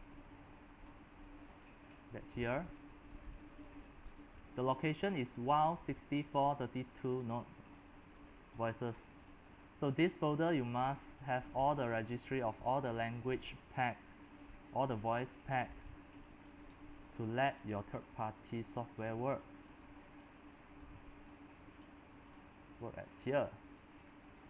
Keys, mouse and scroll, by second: 0.0-6.6 drag, 7.3-15.2 drag, 15.7-24.0 drag, 24.0-24.4 scroll down 7.